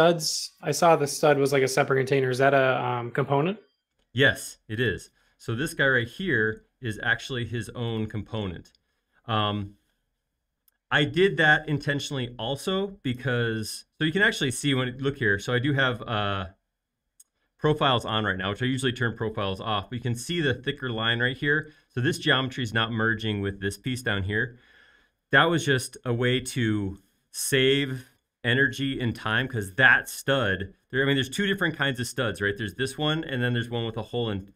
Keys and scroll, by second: 2.3 space, 12.3 Escape.